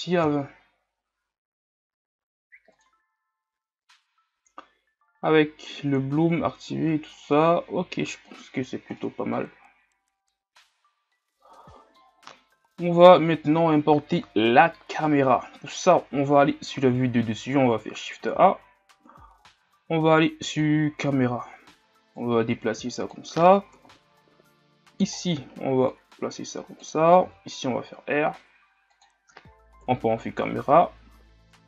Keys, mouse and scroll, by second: 8.7-9.0 scroll down 8, 9.0-9.6 middle drag, 9.6-10.5 scroll up 1, 10.5-14.3 middle drag, 14.3 KP_7, 15.8-19.2 scroll down 1, 22.3-23.8 drag, 23.8 KP_3, 24.9-25.3 scroll down 5, 26.0-27.3 drag, 27.3 r, 29.9 KP_0.